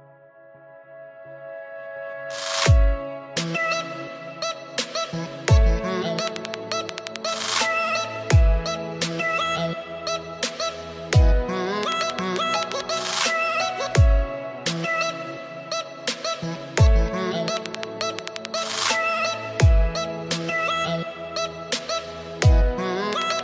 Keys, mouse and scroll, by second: 1.6 scroll up 2, 2.9 click, 3.3 click, 6.3 ctrl+r, 9.9 ctrl+r, 17.1 ctrl+r, 20.2 click, 21.8 click.